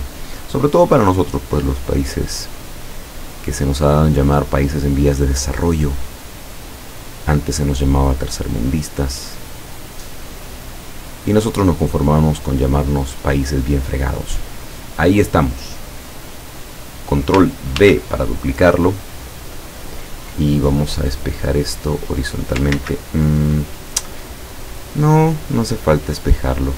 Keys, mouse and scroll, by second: 2.5 click, 4.0 click, 10.4 click, 12.8 click, 16.8 click, 17.8 ctrl+d, 21.7 click, 22.8 ctrl+z, 25.0-26.7 drag.